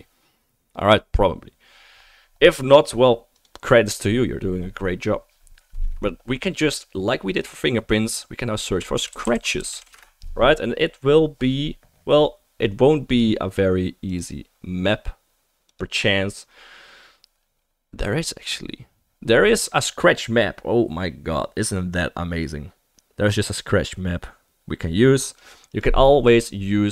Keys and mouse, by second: 3.4-13.5 middle drag, 13.5-26.9 right drag.